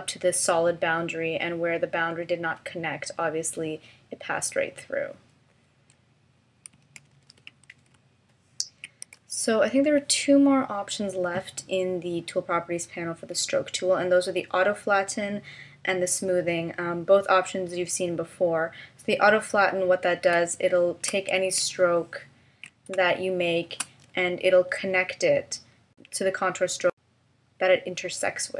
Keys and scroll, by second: 7.1 super+-, 20.4 space, 22.9 space.